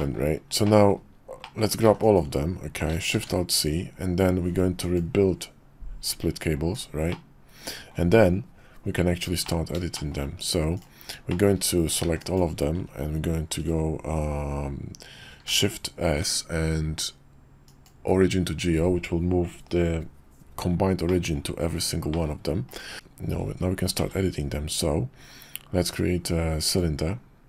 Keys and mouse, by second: 0.0 middle click, 0.6 middle click, 1.4 middle click, 1.8 b, 3.1 alt+shift+c, 6.7-7.1 drag, 7.1-7.9 middle drag, 9.4 middle drag, 9.9 shift+click, 10.7 click, 11.3 shift+click, 12.0 b, 15.5 shift+s, 21.1 middle click, 22.1 middle click, 22.7 click, 24.0 shift+a.